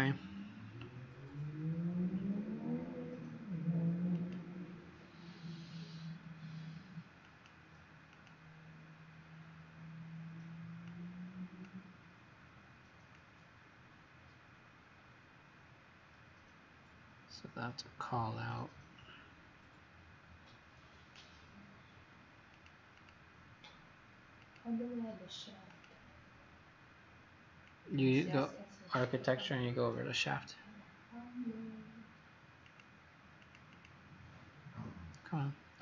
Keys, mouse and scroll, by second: 22.9 click, 24.4 click, 33.7 click.